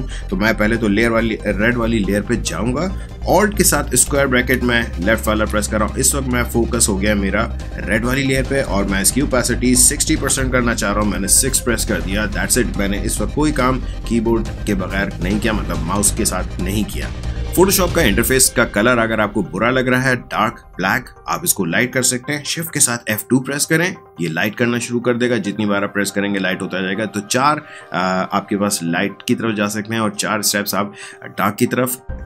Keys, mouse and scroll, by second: 4.0 alt+[, 10.1 6, 23.8 shift+F2.